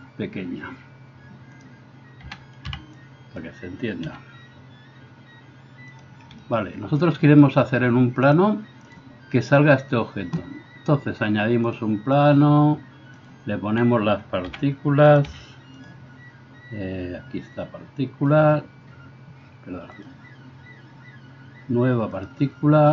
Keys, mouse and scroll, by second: 2.3 a, 2.6 b, 6.1-8.4 shift+middle drag, 8.4-15.2 drag, 14.5 g, 15.2-18.4 middle drag, 16.3 s, 18.4-22.9 drag.